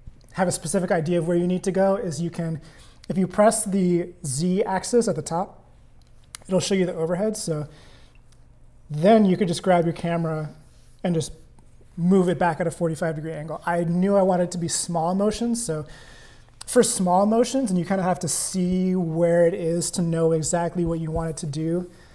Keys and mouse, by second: 4.9 click, 9.8-12.3 drag, 13.1 super+z, 16.7 click, 18.5 click.